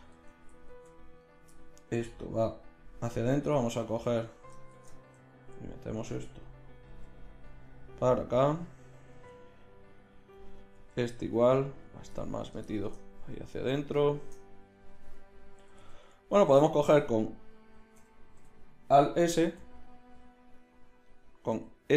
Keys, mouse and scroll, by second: 0.2 Tab, 0.7 z, 4.7 shift+Tab, 6.9 g, 9.2 g, 10.8 g, 15.6 a, 15.8 a, 18.0 o, 18.4 o, 19.4 alt+s, 21.5 s.